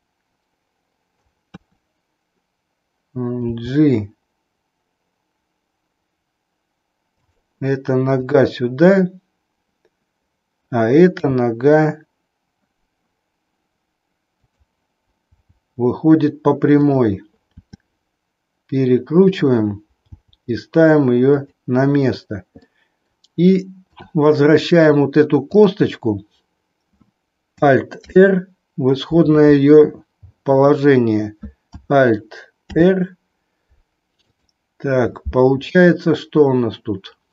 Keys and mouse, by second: 0.1-1.2 middle drag, 1.6 KP_3, 3.3 g, 11.1 r, 15.2 g, 17.6 r, 20.2 g, 22.6 middle click, 25.5 click, 28.0 alt+r, 30.3 click, 32.6 alt+r, 34.2-35.2 drag, 35.7-36.1 middle drag, 36.3-37.3 middle drag.